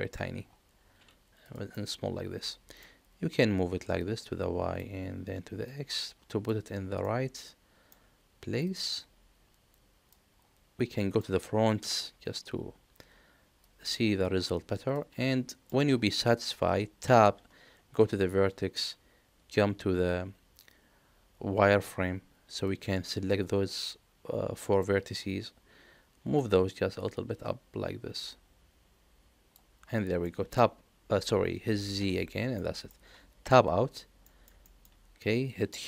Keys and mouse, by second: 1.7-2.7 middle drag, 1.7 s, 4.0 click, 5.6 click, 7.0-7.9 middle drag, 8.6-10.1 drag, 11.0 middle click, 11.8 KP_1, 13.6-14.9 drag, 15.4 shift+middle click, 17.0 Tab, 17.7 1, 21.6 z, 22.6-24.8 drag, 26.3-29.5 drag, 30.2 middle click, 31.9 z, 32.5 middle click, 33.4 Tab, 34.2 middle click, 34.6 shift+middle click.